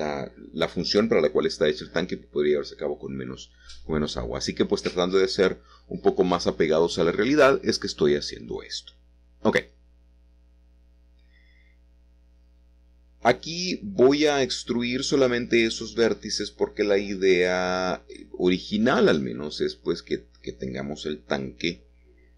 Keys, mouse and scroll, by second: 0.0-2.0 middle drag, 2.7-4.4 middle drag, 4.5-6.7 drag, 6.7-11.6 middle drag, 7.7-9.5 shift+drag, 13.2 g, 14.8 z, 16.4 Escape, 17.4 e, 17.7 z.